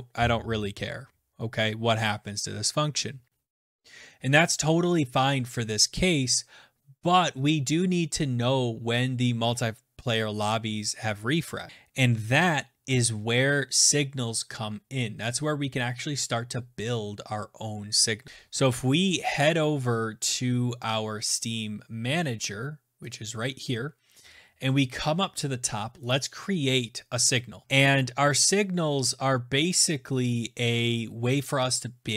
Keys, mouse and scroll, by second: 22.7 click, 23.7-24.2 scroll down 5, 24.2-25.7 scroll, 25.7 click, 25.7 scroll, 27.7 click, 28.0-29.2 scroll, 29.2-29.5 scroll.